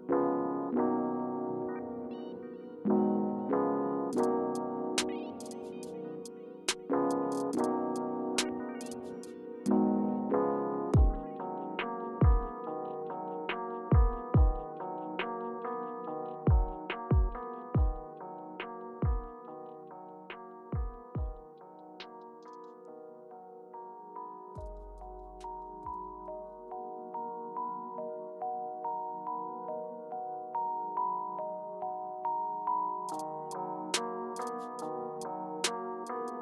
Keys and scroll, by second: 1.5 Return, 6.5 BackSpace, 7.2 Return, 10.6 Return, 12.7 Up, 12.9 typing, 16.7 Return, 17.5 Return, 23.6 Return, 27.3 Return, 27.8 Return, 29.5 BackSpace, 30.7 Return.